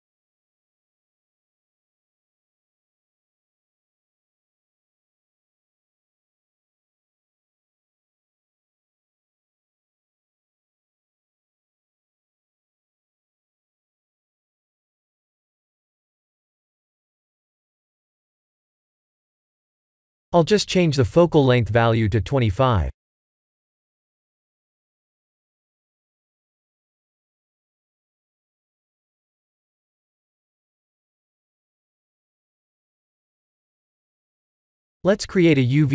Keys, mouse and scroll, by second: 0.9 w, 1.3-2.0 w, 2.3 s, 3.4 shift+s, 4.3 click, 6.7 click, 8.2 click, 10.4-18.1 typing, 19.8 click, 21.3 click, 21.7-22.8 drag, 23.6-26.0 typing, 27.4 w, 28.3 s, 31.5 click, 32.3 click, 32.8 middle click, 33.2-33.9 scroll down 3, 33.9-34.4 middle drag, 34.6-35.0 scroll down 2, 35.2 shift+a.